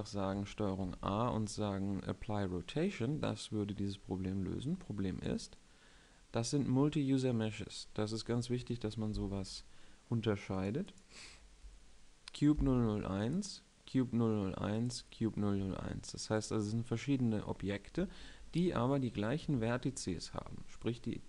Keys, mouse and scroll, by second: 0.8 ctrl+a, 16.9 middle click.